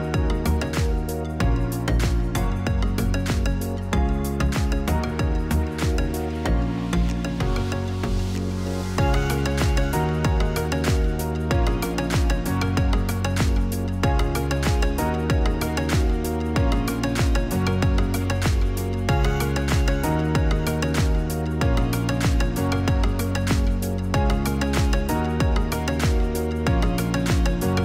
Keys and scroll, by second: 3.1 F9, 3.6 0.